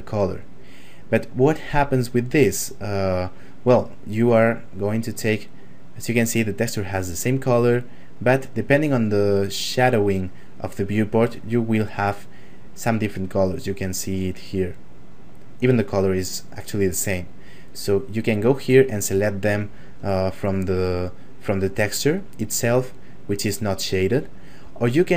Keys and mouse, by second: 4.8 right click, 13.2 right click, 18.0 right click.